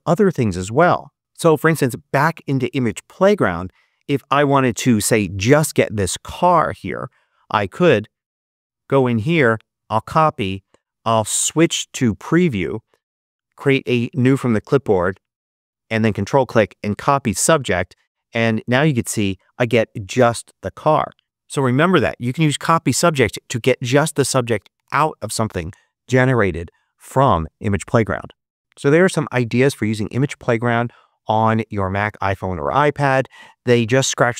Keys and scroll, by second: 11.1 super+Tab.